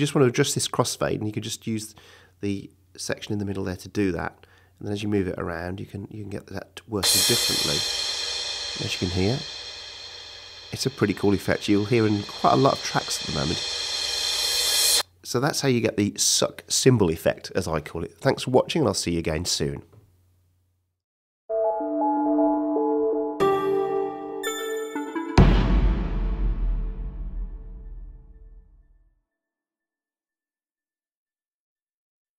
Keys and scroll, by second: 6.8 space, 15.5 space.